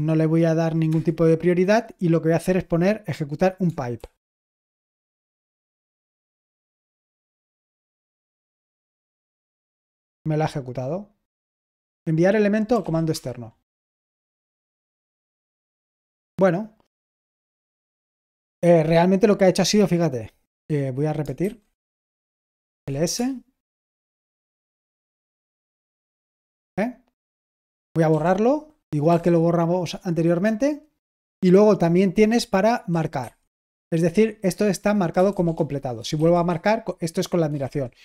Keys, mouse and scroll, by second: 3.9 typing, 9.8 typing, 12.5-13.3 typing, 21.3 typing, 22.5-23.3 typing, 28.1-29.0 typing, 35.6-36.1 typing.